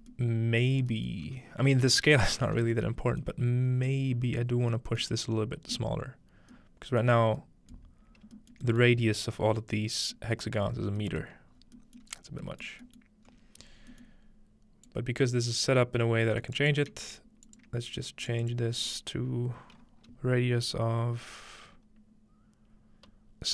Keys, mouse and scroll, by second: 2.0-3.5 scroll down 1, 3.5-5.5 scroll up 2, 8.3 shift+middle click, 8.7 shift+middle click, 9.0 shift+middle click, 9.0-10.5 scroll up 1, 10.6-13.3 scroll down 1, 12.1 middle click, 12.3 middle click, 12.7 middle click, 13.0 middle click, 13.3-13.9 scroll up 5, 14.9-16.7 drag, 16.4 right click, 17.5-19.6 shift+drag.